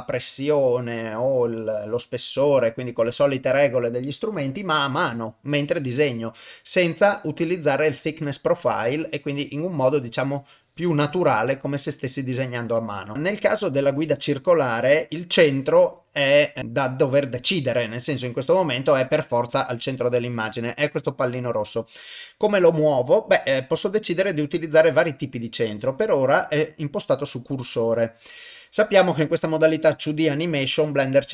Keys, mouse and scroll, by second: 9.8-11.0 drag, 13.6-16.6 drag, 17.7 click, 19.0 click, 23.9-28.8 drag, 29.2 click, 31.1-31.3 drag.